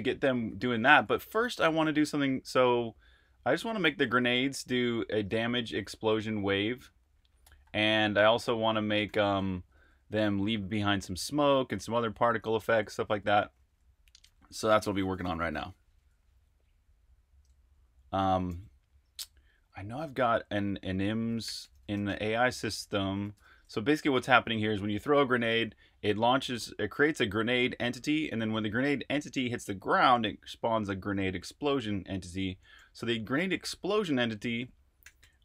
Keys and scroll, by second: 0.0-2.1 typing, 3.8-6.1 typing, 7.3-12.8 typing, 13.4 super+q, 21.2-22.5 typing, 23.3 Return, 34.8-35.4 typing.